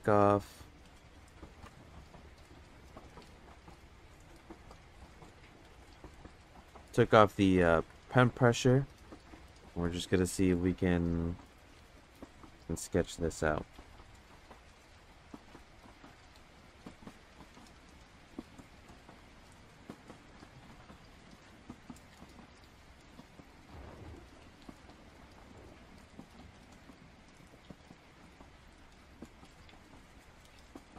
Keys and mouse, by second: 0.0-2.8 drag, 3.4 click, 4.4 ctrl+z, 4.8 click, 5.8 ctrl+z, 6.0 click, 6.9 ctrl+z, 7.0 click, 7.9 ctrl+z, 7.9 click, 8.8 ctrl+z, 9.0 click, 9.8 ctrl+z, 13.6 click, 15.4 click, 16.8 click, 17.9 click, 19.5 click, 20.6 click, 23.5 click, 24.4 click, 24.9 click, 25.1 click, 28.3 click, 29.5 click, 30.3-30.9 drag.